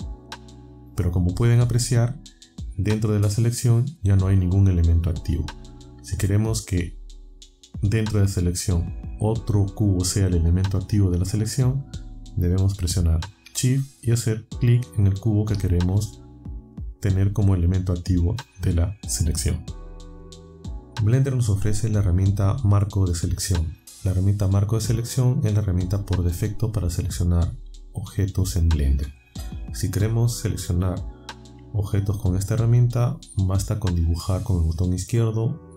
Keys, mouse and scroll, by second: 14.8 shift+click, 32.4 click.